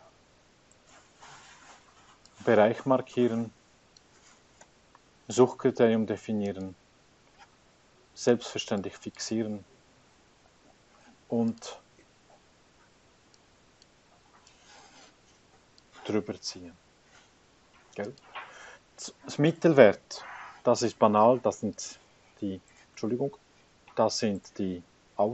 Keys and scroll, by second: 0.4 Tab, 4.9 ,, 9.9 F4, 10.5 Return, 23.4 Escape.